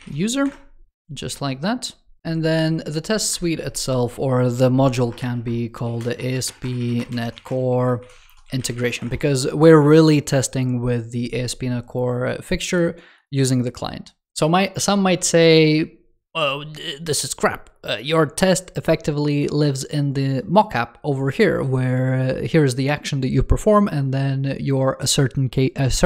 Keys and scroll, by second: 2.2 super+1.